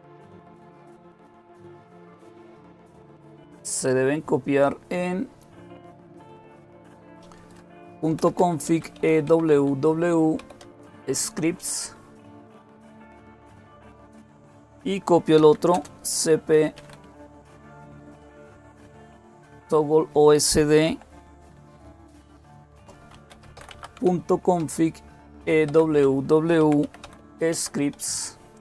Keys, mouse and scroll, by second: 7.4-8.8 typing, 9.1 Tab, 10.0-10.8 typing, 11.0 Tab, 13.0 Return, 14.9-18.6 typing, 19.0 Tab, 21.2-28.4 typing, 25.5 Tab.